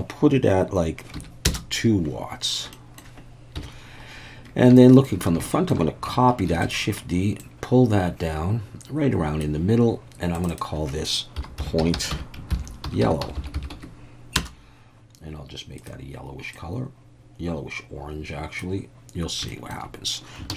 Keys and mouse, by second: 2.7 middle click, 3.6 KP_1, 4.8-5.1 shift+middle drag, 5.5 shift+middle click, 6.5 shift+d, 6.6-9.4 drag, 10.4-15.0 drag, 13.4 l, 15.8 click, 19.5 shift+middle drag, 20.5 shift+d.